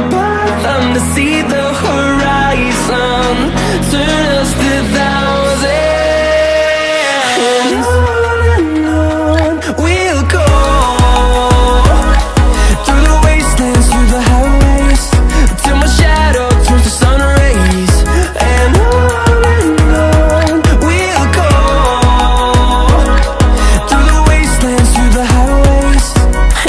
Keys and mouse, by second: 1.4 ctrl+click, 2.4 middle click, 3.4-4.4 middle drag, 6.6 Tab, 7.7 shift+d, 9.3 r, 10.8 KP_9, 11.0 KP_0, 11.9 z, 12.8-15.5 middle drag, 16.0-16.4 middle drag, 17.5 x, 18.6 middle drag, 20.2 Tab, 20.5 middle click, 22.1 click, 25.1 g.